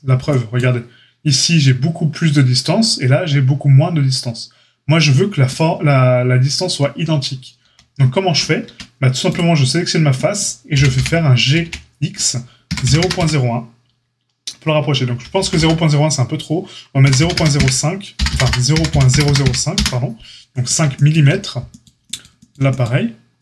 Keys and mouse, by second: 7.6 ctrl+z, 8.6 Tab, 10.7 g, 23.3 click.